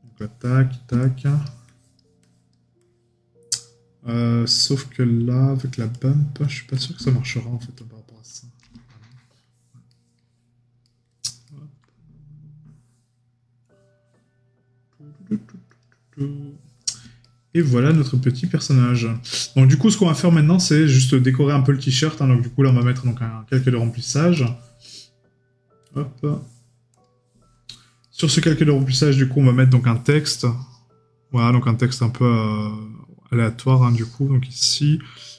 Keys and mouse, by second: 9.1 right click, 11.4 middle click, 17.2 right click, 19.4 right click, 20.1 middle click, 28.0 right click.